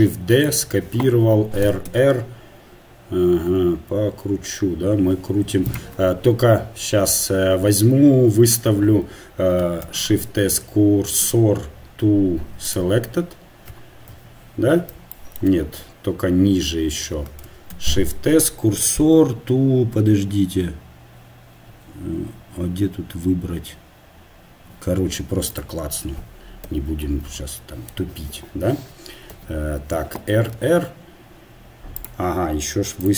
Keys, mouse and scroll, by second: 1.8 r, 12.7 shift+s, 14.6 KP_1, 17.8 shift+s, 25.5-30.2 drag, 26.7 KP_7, 26.8 KP_7, 29.3 KP_7, 30.2 KP_7, 30.2 r.